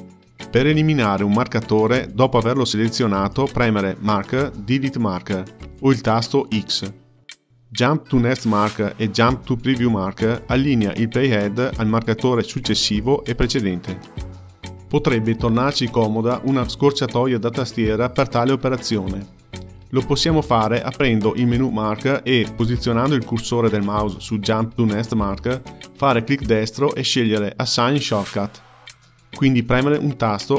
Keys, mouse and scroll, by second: 3.3-3.7 drag, 5.3-8.4 drag, 20.6-25.7 drag.